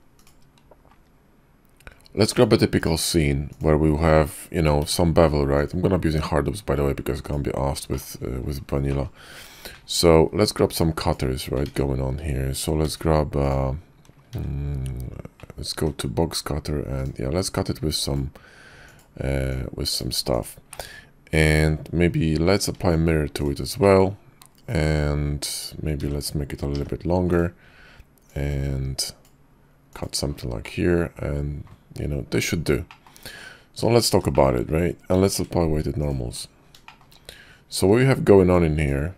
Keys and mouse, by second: 0.2-3.8 drag, 4.8 q, 7.9 shift+middle click, 8.9 click, 9.7 alt+w, 10.5 click, 11.6 ctrl+z, 12.8 d, 13.4 click, 14.3 d, 15.4 alt+w, 15.8 d, 17.5-18.4 drag, 18.8 drag, 19.5-20.4 drag, 20.7-21.7 drag, 20.7-21.7 right drag, 22.7 alt+x, 23.8-24.4 drag, 26.0 s, 28.3-30.0 drag, 30.6-31.7 middle drag, 32.7-33.2 shift+middle drag, 35.1 q, 37.8 ctrl+`.